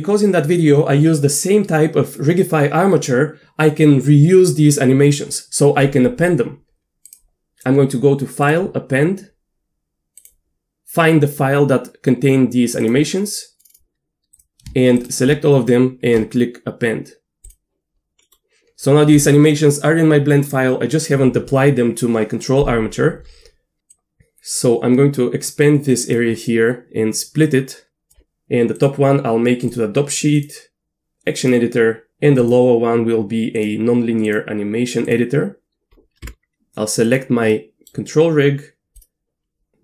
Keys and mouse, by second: 7.1-8.6 drag, 18.3 middle click, 23.9-26.1 drag, 27.4 click, 28.9-29.8 drag, 30.5-31.5 drag, 32.4-32.8 drag, 33.0 click, 33.6 click, 34.4-35.1 drag, 36.2 Tab, 37.5 middle click, 39.0-39.8 drag.